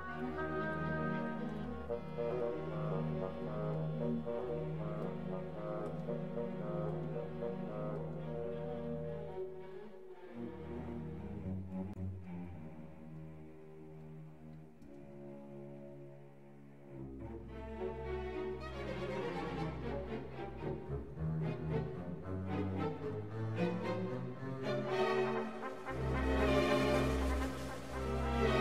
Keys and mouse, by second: 0.0-3.1 typing, 0.1 Tab, 0.7 Tab, 4.5-8.3 typing, 6.3 alt+h, 8.3 alt+h, 8.5 ctrl+s, 10.0 shift+b, 10.3 click, 12.2-19.5 typing, 12.4 right click, 12.8 Tab, 14.0 ctrl+Tab, 14.6 Tab, 14.8 alt+h, 15.8 Tab, 16.4 Tab, 16.6 right click, 18.0 right click, 19.1 alt+h, 20.1 ctrl+s, 20.3 ctrl+s, 20.9 ctrl+s, 21.8 click, 22.0 middle click, 23.0 click.